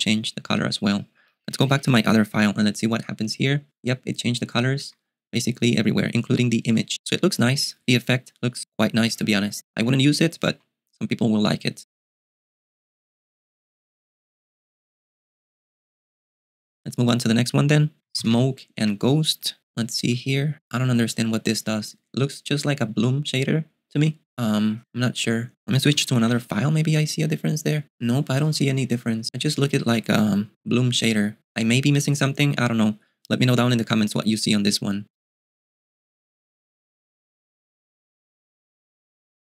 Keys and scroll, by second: 0.0-1.0 typing, 2.7 ctrl+b, 2.7 ctrl+t, 4.6 k, 4.9 j, 10.7 ctrl+b, 10.8 space, 17.8-19.3 typing, 19.6 super+q, 26.3 ctrl+b, 26.5 ctrl+t, 28.8 ctrl+b.